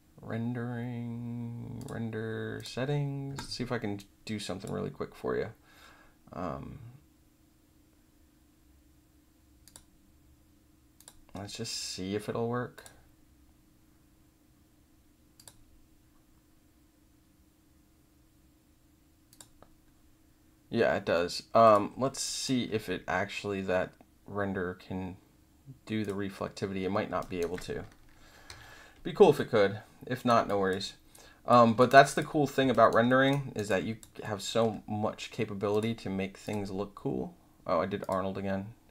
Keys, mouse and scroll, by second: 1.7 click, 2.5 click, 3.9 click, 9.6 click, 10.9 click, 12.7 click, 15.3 click, 19.2 click, 21.6 click, 22.2 alt+right click, 26.0 click, 27.1 alt+click, 28.4 w, 29.3-30.2 drag, 30.4 alt+drag, 31.1-31.4 drag, 31.7 alt+drag, 32.1 click, 32.7 alt+right click, 33.0 alt+middle drag, 33.5 alt+right click, 33.6 alt+click, 34.2-34.5 alt+middle drag, 35.7 click, 36.4 click, 38.0 click.